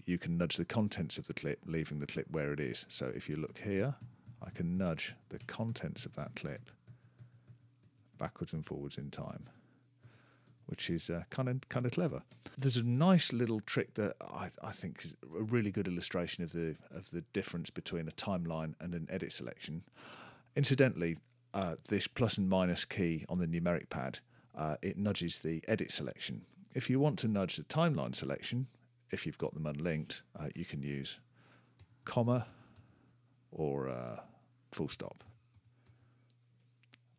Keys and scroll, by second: 3.5 ctrl+=, 5.4 ctrl+-, 8.1 ctrl++, 9.4 ctrl+-, 10.0 ctrl++, 10.4 ctrl+-, 10.9 ctrl+=, 31.8 ., 32.4 ,, 35.2 ,, 35.8 ..